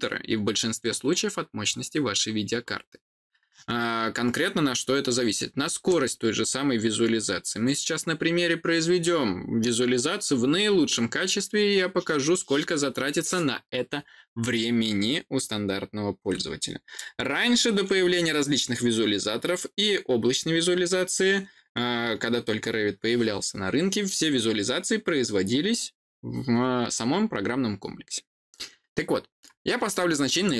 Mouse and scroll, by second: 30.3 click.